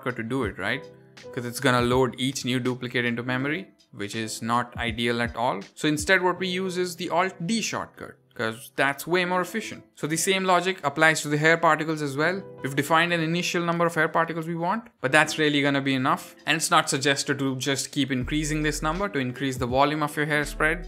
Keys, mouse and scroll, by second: 0.0 shift+d, 0.6 x, 2.5 click, 6.2 x, 7.0 click, 8.0 alt+d, 8.4 x, 9.8 click, 14.3 click, 15.3 click, 16.6 click, 17.8 click, 18.5 click.